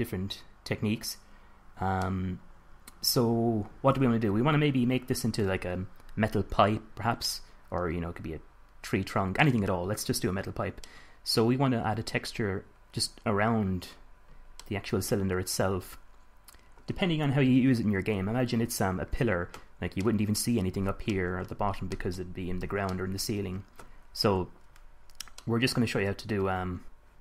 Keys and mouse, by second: 7.5-8.4 middle drag, 9.3-15.1 middle drag, 15.8-16.7 middle drag, 17.7 KP_1, 18.8 KP_5, 25.6-26.7 middle drag.